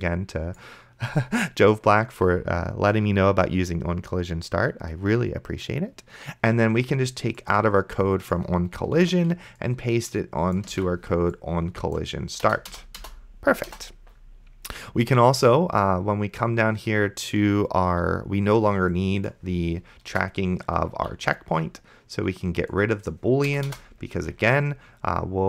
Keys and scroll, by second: 9.3 ctrl+x, 11.0 ctrl+v, 12.5 BackSpace, 20.4 BackSpace, 21.2 ctrl+z, 23.5 BackSpace.